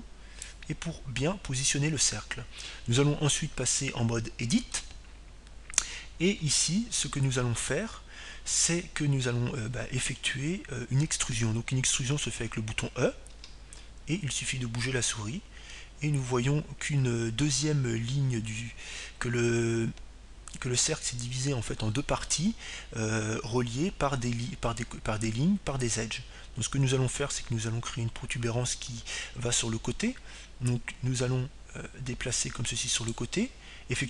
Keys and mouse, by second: 3.2-5.2 drag, 7.2 Tab, 16.0 e.